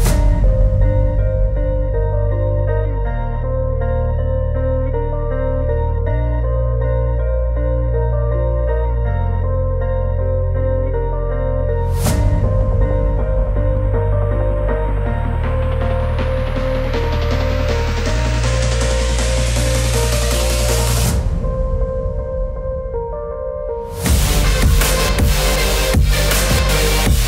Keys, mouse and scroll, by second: 0.2 space, 0.9-2.5 drag, 7.7 right click, 8.9 click, 13.5 right click, 14.8-18.1 drag, 19.3 l, 20.1 click, 23.0 c, 24.7 click, 25.4 scroll up 1, 26.8 click.